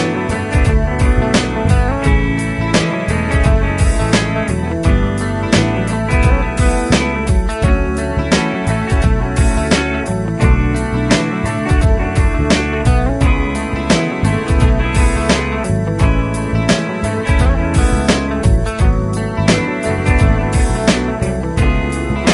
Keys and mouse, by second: 6.4 double click, 12.2 double click, 16.1 Delete, 21.0 |.